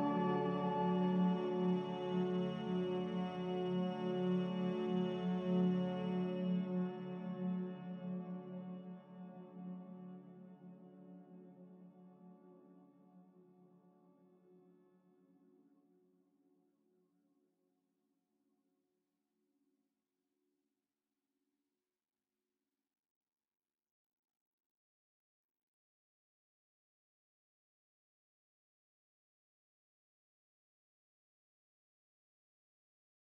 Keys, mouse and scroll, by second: 4.1 Escape, 4.2 Escape, 4.4 Escape, 5.0 a, 16.4 m, 29.0 b.